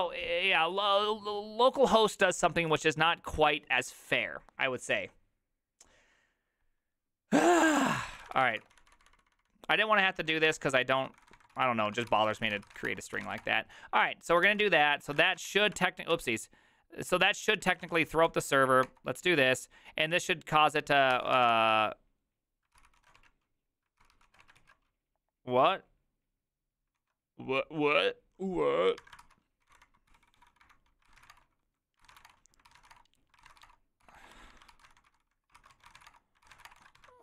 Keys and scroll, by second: 7.7-15.6 typing, 14.4 ctrl+h, 15.6 ctrl+c, 16.1 Up, 17.1 Return, 17.7 ctrl+a, 17.9 ctrl+a, 18.3 Up, 18.8 Return, 21.1 ctrl+c, 21.1 3, 21.3 Up, 22.7 Return, 22.7 ctrl+c, 22.9 ctrl+c, 23.0 ctrl+a, 23.2 2, 24.0 ctrl+c, 24.3 ctrl+a, 24.4 [, 24.6 ctrl+u, 27.0 ctrl+a, 29.0-37.2 typing, 29.2 ctrl+c.